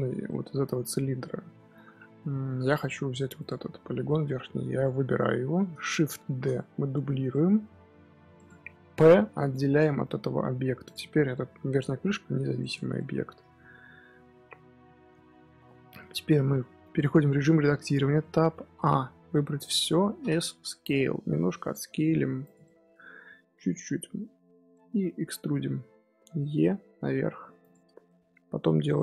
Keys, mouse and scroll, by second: 0.1 scroll down 1, 0.2-2.6 middle drag, 2.6-3.3 scroll up 2, 3.3 click, 4.4-6.2 middle drag, 6.2 shift+d, 8.9 p, 9.8 middle click, 10.4 Tab, 10.7 click, 11.2 middle click, 11.8 g, 12.9-15.8 middle drag, 15.8 KP_1, 16.5-17.9 middle drag, 17.9 Tab, 18.1 middle click, 18.6 a, 20.1 s, 22.5-25.4 middle drag, 25.4 e, 28.0-29.0 shift+middle drag.